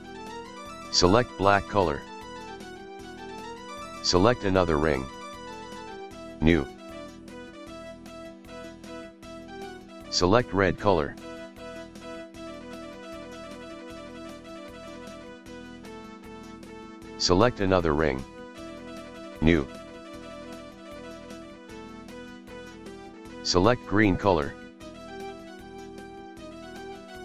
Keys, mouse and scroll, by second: 2.2 click, 3.8 click, 6.3-8.0 drag, 16.0 drag, 17.2 click, 19.6-21.6 drag, 25.8 click.